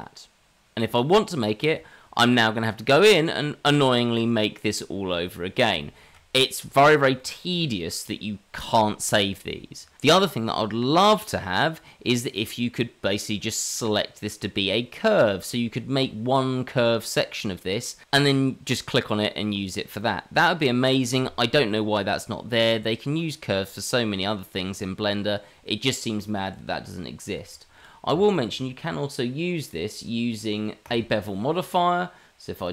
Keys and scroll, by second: 28.1 Tab.